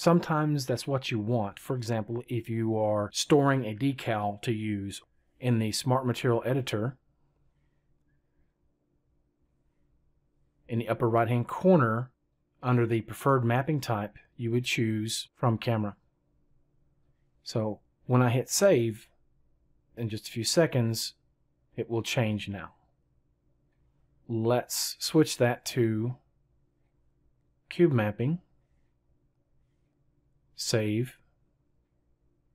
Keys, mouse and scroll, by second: 6.6-8.1 right drag.